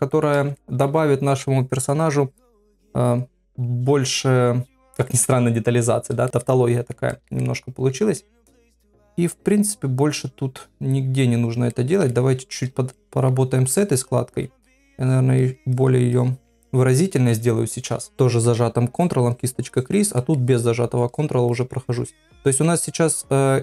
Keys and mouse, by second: 0.1 shift+middle click, 0.6 ctrl+middle click, 6.4 middle click, 7.1 ctrl+middle click, 7.4 middle click, 8.2-10.6 middle drag, 11.7 ctrl+middle click, 12.1 shift+middle click, 12.9 middle click, 15.0 ctrl+click, 15.4 ctrl+click, 15.7 ctrl+click, 16.1 ctrl+click, 16.6 ctrl+click, 19.0 click, 19.3 click, 19.7 click, 20.2 middle click, 21.1 click, 21.5 click, 22.1 click, 22.5 middle click.